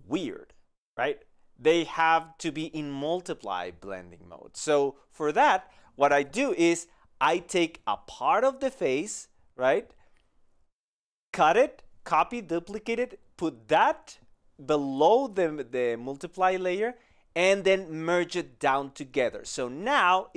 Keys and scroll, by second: 0.9 ctrl+z, 17.8 i, 18.3 ctrl+e.